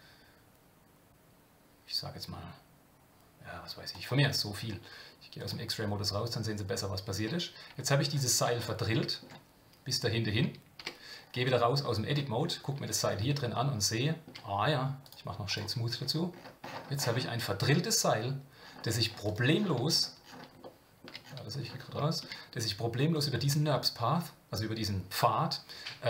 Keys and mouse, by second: 5.4 click, 7.2 Tab, 7.7 Tab, 8.5 middle click, 10.8 Tab, 11.8 middle click, 13.4 shift+middle click, 15.0 right click, 20.6-21.0 shift+middle drag, 21.0 shift+click, 21.9-22.2 shift+middle drag, 23.7 Tab.